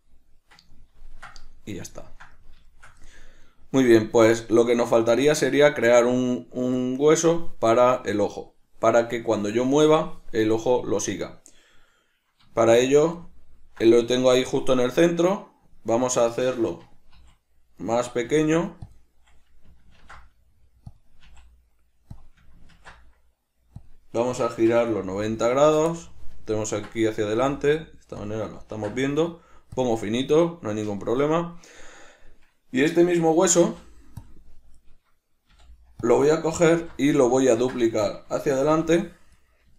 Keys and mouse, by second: 0.8-4.7 ctrl+middle drag, 4.7 right click, 5.3 Tab, 6.9-16.2 middle drag, 12.8 shift+a, 16.2 right click, 17.3 s, 18.0 right click, 18.4 s, 19.1 click, 20.1 ctrl+alt+s, 21.1 click, 21.4 s, 22.4 click, 22.9 ctrl+alt+s, 24.0 click, 24.5 r, 26.1-28.4 middle drag, 27.5 s, 28.4 click, 28.8 ctrl+alt+s, 30.0 click, 30.2-39.5 middle drag, 33.8 ., 38.5 shift+d, 39.5 click.